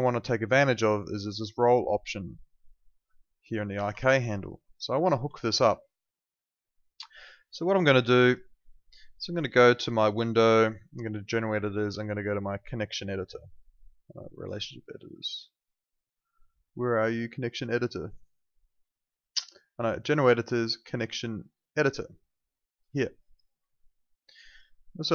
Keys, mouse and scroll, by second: 1.5 middle click, 3.7 ctrl+z, 4.1 alt+click, 4.4 alt+right click, 5.3 alt+click, 8.2 click, 23.2 click.